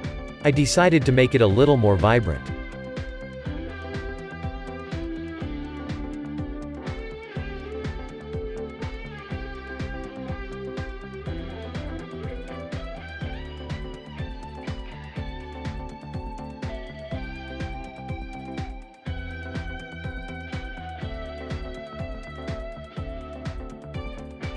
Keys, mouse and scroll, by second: 2.6 g, 10.1 Tab, 10.7 click, 10.9 scroll down 2, 11.1-12.5 shift+middle drag, 12.5-13.0 scroll up 5, 13.0-14.6 middle drag, 14.6 Tab, 16.1 g, 18.5 Tab, 19.3-20.3 scroll down 4, 20.3-21.1 scroll down 1, 21.1-24.3 shift+middle drag, 24.3 click.